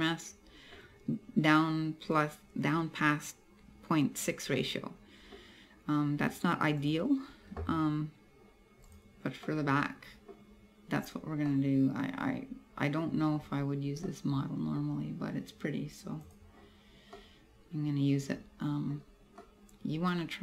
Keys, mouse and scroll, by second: 4.6 middle click, 5.5-6.2 scroll up 2, 6.2-6.9 scroll down 1, 6.9 right click, 8.9 right click, 9.5 middle click, 11.0-11.5 scroll down 1, 11.5 middle click, 13.1-13.6 scroll up 3, 14.1 middle click, 14.8 scroll down 2, 16.3 click, 17.2 middle click, 19.0-19.5 scroll up 1, 19.5 middle click.